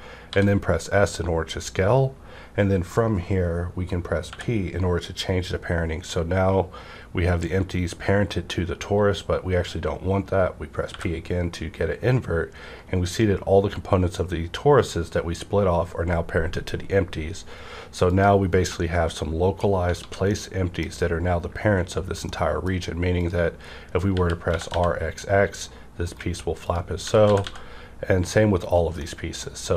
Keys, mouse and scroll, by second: 0.3 s, 4.3 p, 4.3 s, 10.9 p, 18.0 click, 18.1 click, 18.1 p, 18.6-20.3 middle drag, 19.9 alt+a, 20.5 scroll down 1, 22.3-24.1 middle drag, 23.2 click, 24.1-24.7 typing, 26.6 click, 26.6 right click, 26.6-27.4 typing, 26.6 click, 28.6 right click, 29.0 middle click, 29.5 scroll down 1.